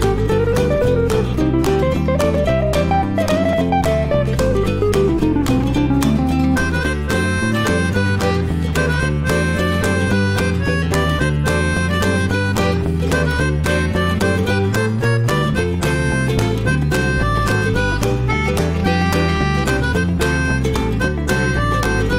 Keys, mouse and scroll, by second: 0.0-0.8 drag, 1.1 click, 1.3-4.9 middle drag, 4.9 click, 5.2 middle click, 5.6 Tab, 6.1 Tab, 6.4 drag, 6.8 alt+middle click, 7.0 alt+middle click, 7.5-7.8 shift+middle drag, 7.8 click, 8.7 ctrl+shift+x, 18.0-22.1 shift+middle drag.